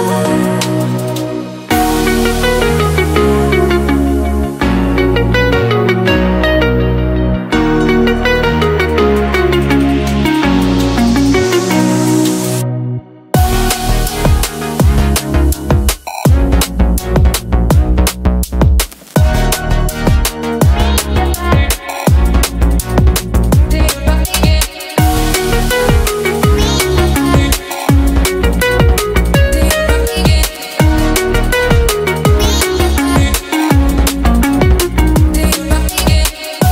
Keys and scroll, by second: 4.1 space, 33.3 t.